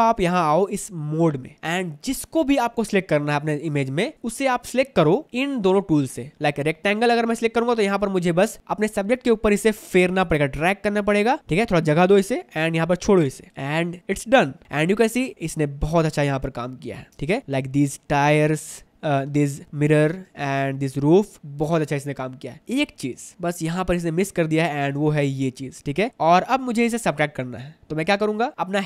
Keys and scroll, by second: 15.0 ctrl+alt+space, 15.3 ctrl+alt+space, 17.4 space, 23.3 ctrl+alt+space, 26.1 ctrl+alt+space.